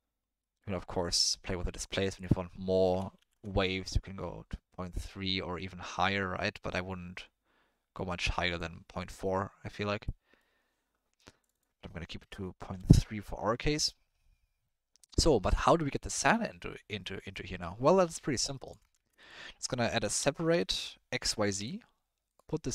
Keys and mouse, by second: 0.4 middle click, 0.7 middle click, 2.1-3.3 drag, 5.0-8.6 drag, 9.0 middle drag, 10.0-10.5 middle drag, 11.4-12.8 drag, 16.2 middle click, 17.4 click, 18.2 middle click, 18.5 middle click, 18.7 click, 18.9 shift+a.